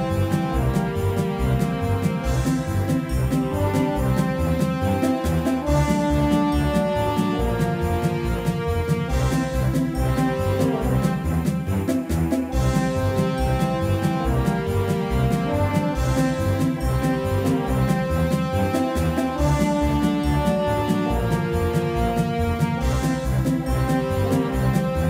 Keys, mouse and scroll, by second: 3.0 middle click, 3.6-5.9 drag, 5.4 s, 8.9 x, 10.2 s, 14.8-21.9 drag, 18.7 r, 22.5 r, 23.5-25.0 drag.